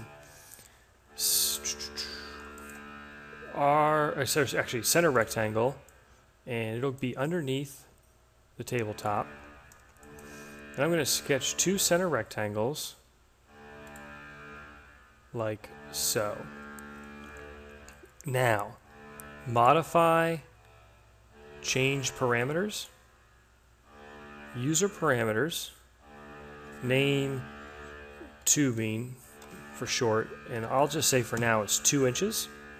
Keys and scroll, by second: 27.8-29.8 typing, 31.2 2.